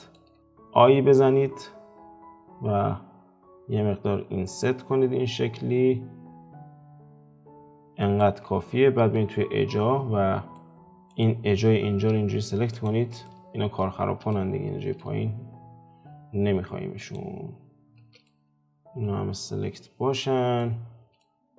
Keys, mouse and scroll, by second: 9.0 Tab, 10.5 middle click, 11.1 alt+click, 12.7 alt+shift+click, 13.2-17.0 middle drag, 17.0 alt+shift+click, 18.2-19.8 middle drag, 19.8-20.6 scroll down 5, 20.6-21.5 middle drag.